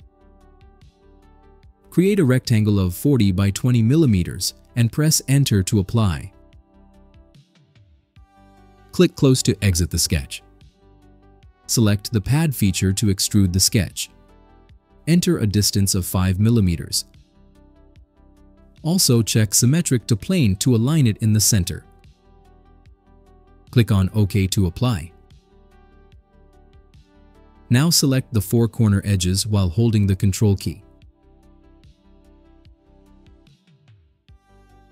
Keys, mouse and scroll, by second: 0.1 click, 2.1 4, 2.7 0, 3.4 Tab, 3.9 2, 4.4 0, 6.5 Return, 10.4 click, 13.9 click, 16.5 5, 17.6 click, 20.9 click, 25.8 click, 28.0 click, 28.7 click, 30.8 ctrl+click, 31.6-32.6 drag, 33.4 ctrl+click, 34.3 ctrl+click.